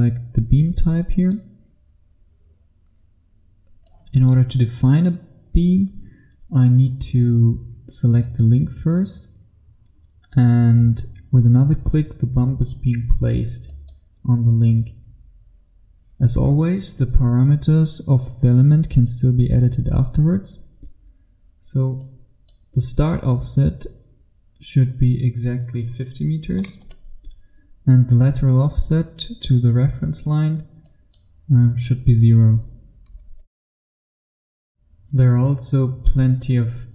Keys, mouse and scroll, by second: 6.0-8.3 scroll up 1, 8.3 click, 12.3-13.7 scroll up 1, 13.7 click, 26.7 KP_5, 30.9 click, 31.4 click, 33.3 KP_0, 34.2 f.